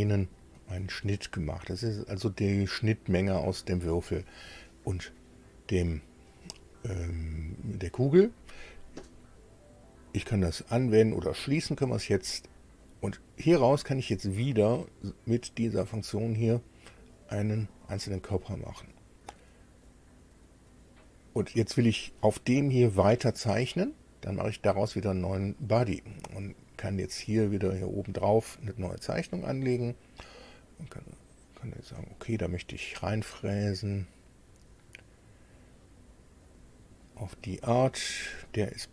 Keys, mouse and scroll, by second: 11.4 click, 12.8 click, 15.8 click, 17.7 click, 24.5 click, 27.3 click, 29.2 click, 31.8 click, 34.2 click, 36.4 click, 37.0 right click, 38.2 click.